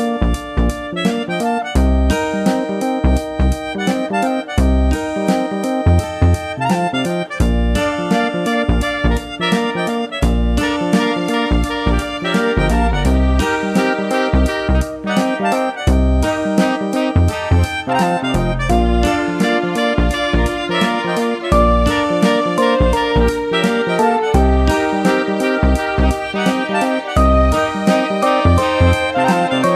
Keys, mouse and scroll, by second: 0.8 click, 2.2 click, 5.5 click, 7.0 click, 8.8 click, 10.8 click, 13.6 click, 16.5 right click, 17.5 click, 18.6 click, 18.8 click, 20.7 click, 20.7 click, 22.6 click, 24.4 click, 26.3 click.